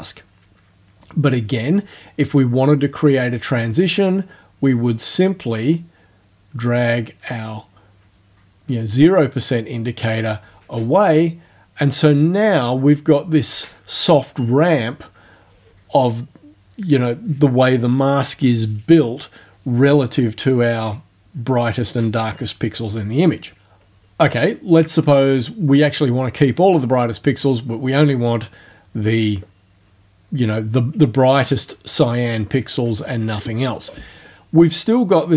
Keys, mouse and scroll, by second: 4.3-10.3 drag, 9.7 right click, 25.2 click.